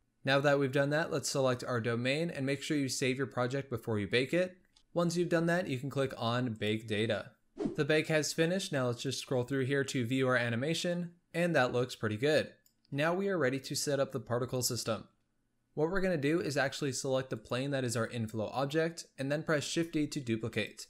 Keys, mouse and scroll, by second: 0.0 ctrl+s, 4.7 ctrl+s, 6.4-7.7 drag, 9.2-12.4 drag, 17.2 click, 19.6 shift+d.